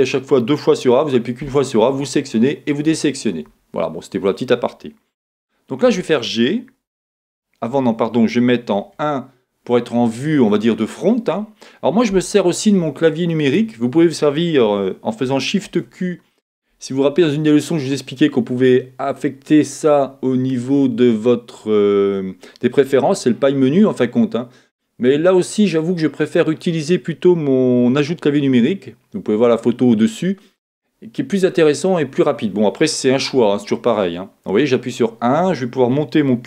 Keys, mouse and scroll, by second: 0.0-36.4 drag, 5.8 g, 15.7 shift+q.